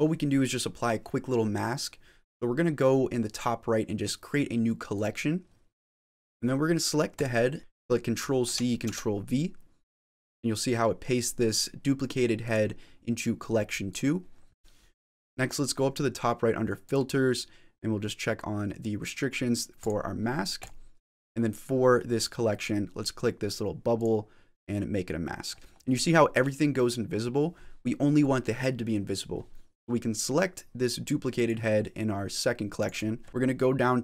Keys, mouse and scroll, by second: 4.8 click, 6.1 click, 7.0 click, 7.6 click, 8.4 ctrl+c, 9.1 ctrl+v, 12.3 click, 13.7 click, 16.7 click, 20.5 click, 23.9 click, 31.2 click, 32.6 click, 32.8 click, 33.3 click.